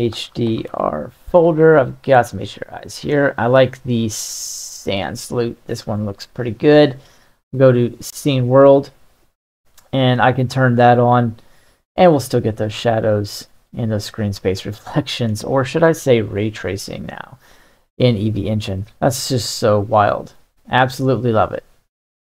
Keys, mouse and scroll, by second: 5.5 middle click, 7.0-9.4 drag, 9.9-13.6 middle drag, 14.4-15.4 middle drag, 17.2-18.9 middle drag, 19.3-20.4 middle drag, 20.8-21.4 middle drag.